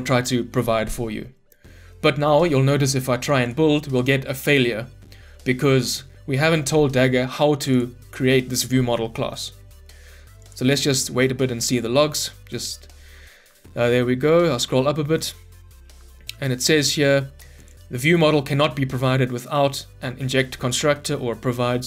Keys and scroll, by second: 3.7 ctrl+F9.